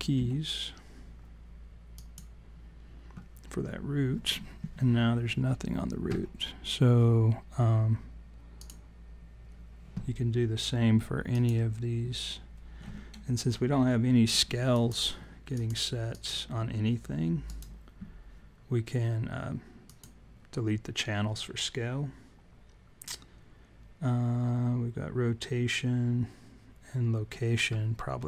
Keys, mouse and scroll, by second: 0.1 Delete, 8.6 click, 11.3 click, 14.7 click, 15.5 shift+click, 17.4 right click.